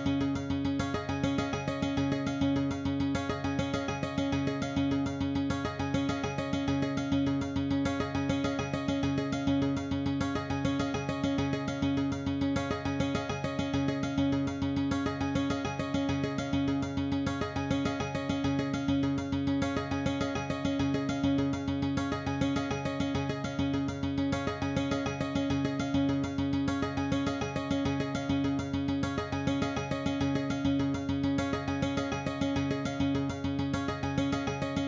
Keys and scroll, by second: 25.4 2, 33.3 ctrl+F9, 34.2 ctrl+p.